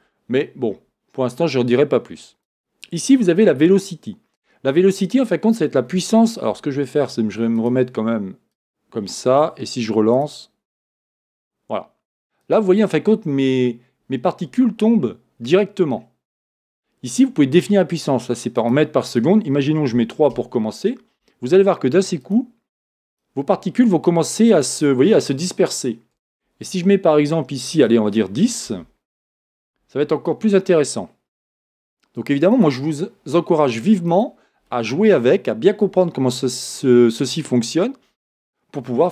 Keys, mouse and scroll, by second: 2.6-10.3 drag, 3.0-7.2 scroll down 1, 11.0-12.7 drag, 15.6-15.9 scroll up 1, 15.9-18.6 scroll down 1, 18.6-26.4 drag, 20.4 Return, 29.4 Return, 29.4-39.1 drag.